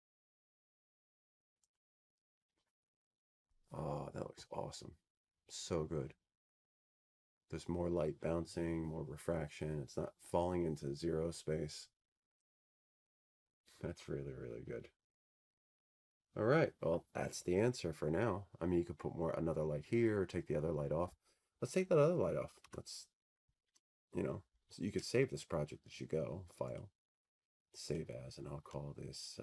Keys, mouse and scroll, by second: 0.6 F3, 1.2 F4, 2.4 F4, 4.4 click, 7.4 click, 28.1 Escape.